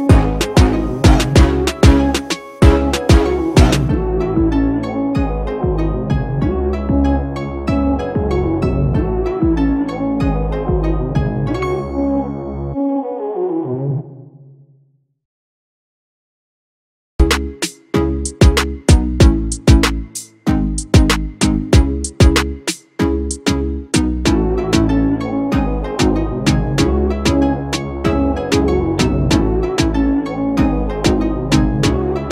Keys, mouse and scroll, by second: 6.7 Delete, 9.9 ctrl+c, 10.7 ctrl+f, 16.3 alt+shift+click, 19.4 ctrl+=, 19.9 ctrl+=, 20.7 Down, 20.9 Down, 21.1 Down, 21.5 Up.